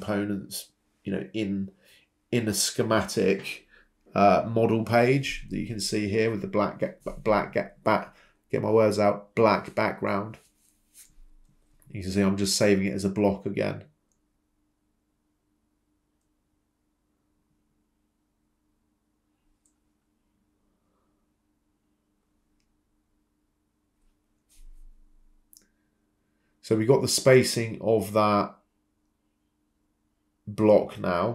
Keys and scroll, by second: 1.6 Escape, 2.9 typing, 4.8 Escape, 5.3-6.7 typing, 9.6-10.0 typing, 11.1-12.7 typing, 18.7 Return, 21.3 Escape, 25.6 Escape, 27.1 Delete.